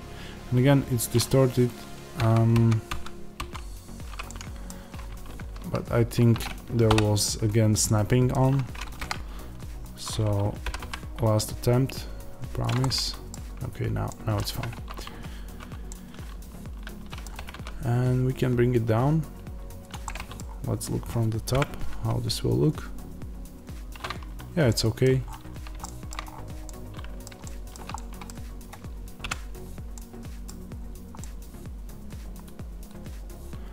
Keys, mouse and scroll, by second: 2.1 ctrl+z, 4.6 scroll down 1, 5.3 shift+Tab, 6.8 o, 8.9 KP_1, 9.7-10.6 scroll up 1, 10.6 g, 12.6 click, 12.7-15.5 middle drag, 13.2-14.0 scroll down 1, 14.4 Tab, 15.5 z, 17.3-19.8 middle drag, 17.3 g, 19.8 click, 20.0 middle click, 20.3 scroll down 1, 21.5 KP_0, 24.6-33.7 middle drag, 25.1 scroll up 1, 26.2-26.6 scroll up 1, 29.1 KP_Decimal, 30.4 scroll down 1.